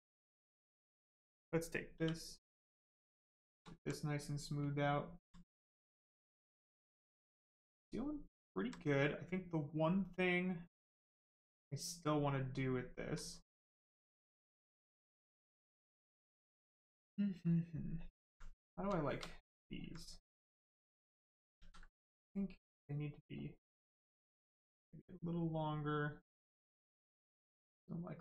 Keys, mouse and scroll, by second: 0.2 alt+click, 0.6 right click, 3.7 alt+right click, 7.4 alt+right click, 8.8 right click, 9.9 alt+right click, 18.0 alt+click, 18.5 right click, 19.6 alt+click, 20.8 click, 21.6 ctrl+z, 26.7 click.